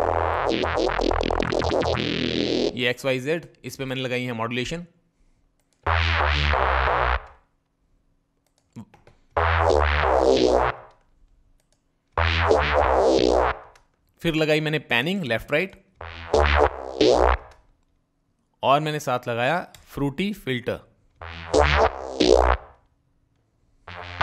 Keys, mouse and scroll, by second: 2.1-2.5 drag, 2.5 click, 8.1 click, 11.2 click, 14.9 click, 18.3 click.